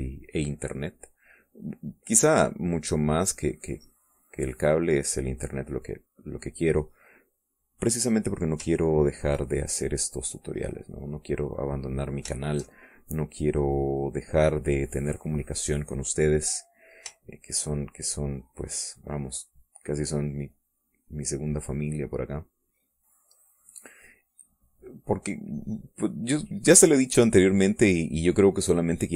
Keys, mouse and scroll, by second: 1.4-7.2 drag, 7.3 middle click, 9.9 ctrl+click, 10.6-17.6 drag, 17.9 shift+click, 18.5-21.1 shift+drag, 21.2-23.9 drag, 24.3 middle click, 25.2-27.8 drag, 27.9-29.1 drag.